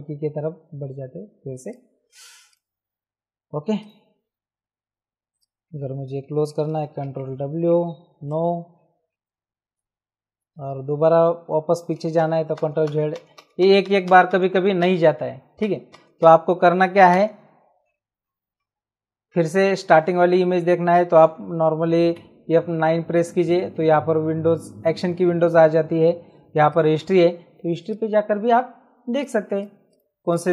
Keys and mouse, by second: 1.6 click, 3.8 click, 5.3 click, 6.6 ctrl+w, 8.2 Return, 12.2 ctrl+z, 16.8 ctrl+alt+z, 19.3 ctrl+z, 22.1 F9, 26.7 click, 27.8 click, 29.1 click.